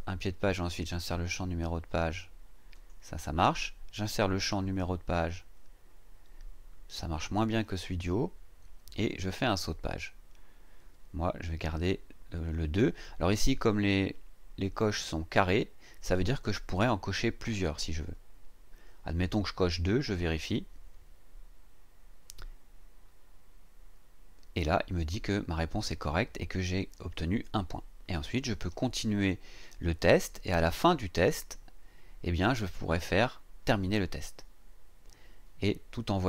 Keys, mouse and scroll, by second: 2.7 click, 20.4 click, 24.4-24.7 scroll down 2, 28.1-28.5 scroll down 2, 29.5 scroll down 1, 30.5-31.2 scroll down 3.